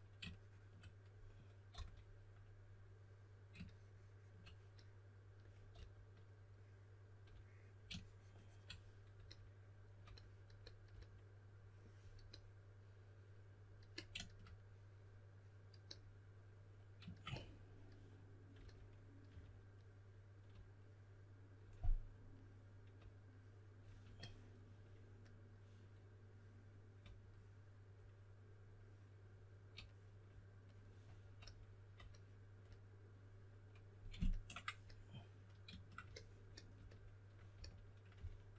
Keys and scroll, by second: 1.7 s, 5.7 s, 19.2 4, 37.5-38.5 typing.